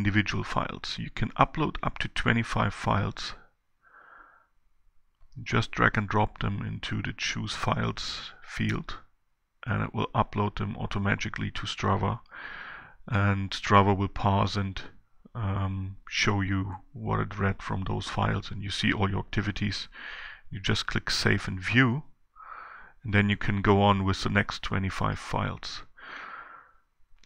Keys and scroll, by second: 0.2 shift+Down, 2.8 shift+Down.